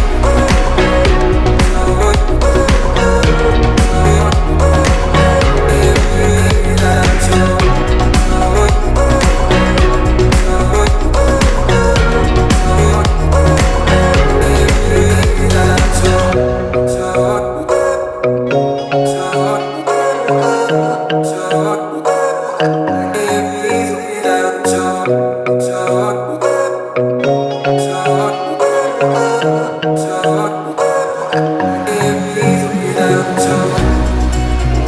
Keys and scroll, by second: 0.0 space, 0.6 p, 4.0 t, 5.5 1, 5.6 Return, 5.9 space, 6.6 l, 8.0 space, 8.6 p, 13.2 t, 14.4 1, 14.5 Return, 14.7 space, 15.4 l, 17.4 p, 25.6 t, 26.8 space, 28.6 l, 29.7 space, 30.0 p, 30.3 space, 31.0 p.